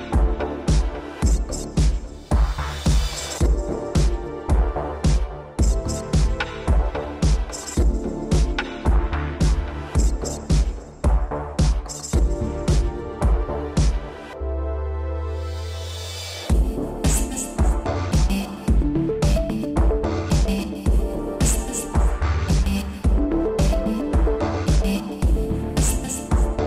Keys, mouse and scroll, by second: 0.7 click, 1.4 scroll down 2, 1.8 middle click, 2.5 scroll down 2, 3.4-3.8 scroll up 3, 4.0 scroll down 3, 4.3 middle click, 4.8 scroll up 3, 5.3 middle click, 6.0 shift+space, 6.7 Escape, 8.0 click, 9.7 middle click, 10.1 scroll up 2, 10.9 Left, 11.1 Left, 12.7 ctrl+c, 13.0 Up, 13.4 ctrl+v, 14.8 ctrl+z, 15.5 Left, 16.5 ctrl+c, 17.0 Right, 17.5 ctrl+v, 18.1 shift+Left, 18.6 shift+space, 19.3 Escape, 19.9 Right, 20.2 Right, 20.5 Right, 24.9 click.